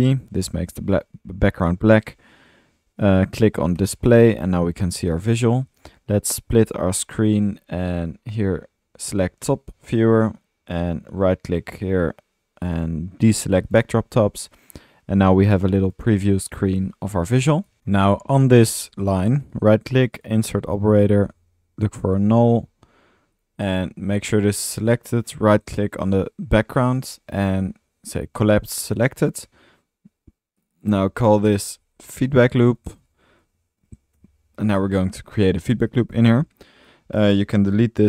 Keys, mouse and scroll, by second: 0.7-2.0 middle drag, 4.2 middle click, 4.8 click, 5.1 click, 5.3-5.6 middle drag, 6.6 click, 6.8 click, 8.1 drag, 10.3 right drag, 10.5-10.9 drag, 11.1-11.5 drag, 13.8 click, 18.0-19.0 alt+middle drag, 19.4 right click, 19.5-20.0 right drag, 20.9-22.1 typing, 22.7 drag, 26.8-27.4 drag, 30.7 click.